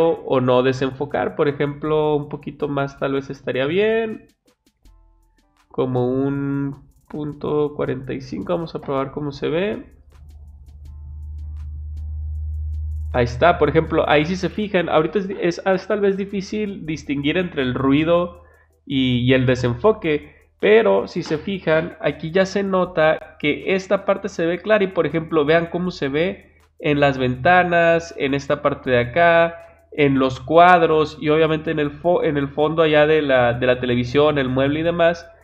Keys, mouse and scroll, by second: 1.0 click, 2.6 click, 3.7 click, 5.7 click.